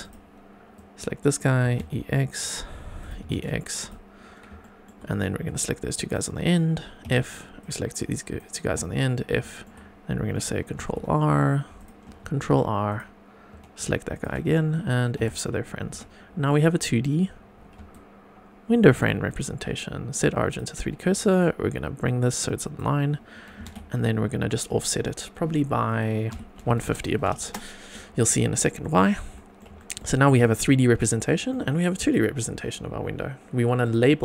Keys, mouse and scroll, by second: 0.0 click, 0.7 click, 1.6 e, 1.7 x, 3.0 click, 3.2 e, 3.3 x, 3.8 click, 4.6 shift+middle click, 5.4 click, 7.0 f, 7.6 click, 8.6 f, 9.1 scroll down 2, 9.4 shift+middle click, 9.8 scroll up 2, 10.7 ctrl+r, 12.5 ctrl+r, 14.1 shift+click, 15.1 f, 15.9 Tab, 16.1 scroll down 2, 16.4-16.9 middle drag, 17.2 scroll up 2, 17.9 shift+right click, 19.2 right click, 22.0 click, 23.5 g, 23.6 y, 26.3 KP_Subtract, 26.5 KP_1, 26.6 KP_5, 26.8 KP_0, 27.4 Return, 28.0-28.6 scroll down 2, 28.5-28.8 middle drag, 29.0-29.3 scroll up 1, 29.3 middle click, 29.8 shift+middle click, 30.3 click, 30.7 scroll up 2, 31.0-31.6 shift+middle drag, 32.0 click, 33.8 click.